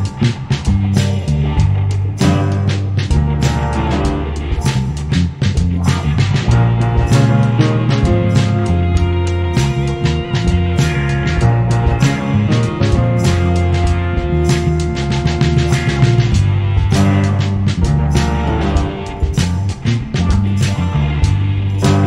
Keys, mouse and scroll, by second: 0.7-2.6 typing, 8.0 click, 9.0 middle click, 9.4 KP_5, 11.1 middle click, 11.4 g, 12.1 Tab, 13.0 a, 13.0 ctrl+s, 14.3 Tab, 14.8 s, 16.0 g, 16.8 ctrl+r, 17.5 ctrl+r, 18.2-20.7 typing, 21.7 Tab.